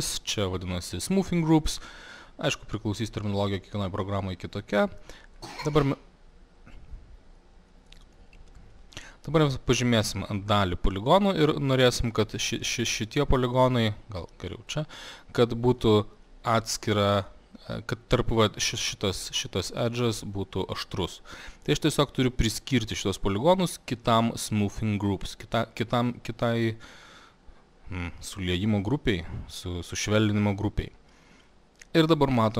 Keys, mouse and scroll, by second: 4.8 click, 5.4 click, 7.7 middle click, 9.1 middle click, 9.7 middle click, 11.2 click, 14.7 click, 16.2 alt+middle click, 26.3 click, 27.0 click, 31.5 click, 32.4 middle click.